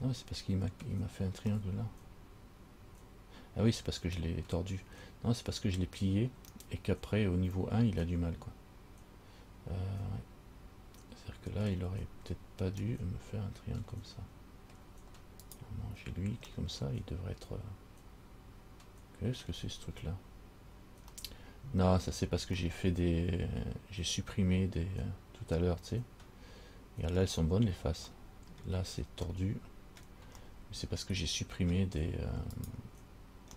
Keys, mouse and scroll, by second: 1.9 middle click, 13.1 middle click, 15.7 right click, 16.7 middle click, 21.4 middle click, 22.8 middle click, 25.7 middle click, 28.3 middle click, 29.5 middle click, 30.7 middle click, 32.8 right click.